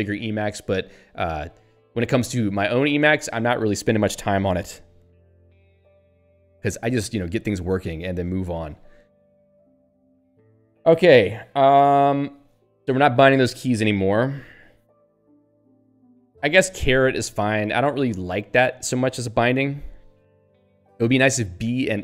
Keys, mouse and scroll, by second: 6.2 ctrl+n, 6.8 ctrl+p, 7.2 Return, 12.0 Down, 14.2 Up.